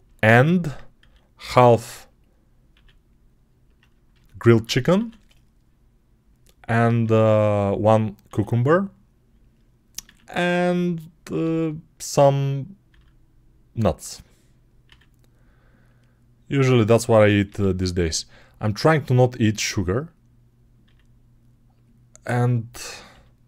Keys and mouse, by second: 0.8 e, 2.6 r, 4.8 e, 6.9 r, 8.1 e, 9.9 r, 11.3 g, 11.9-16.7 middle drag, 12.7 e, 14.7 r, 16.7 click, 16.8-18.5 middle drag, 17.3 g, 18.5 click, 18.7-19.9 middle drag, 18.7 g, 19.9 click, 20.3-22.1 middle drag, 20.7 e, 22.1 click, 22.9-23.4 middle drag, 22.9 g.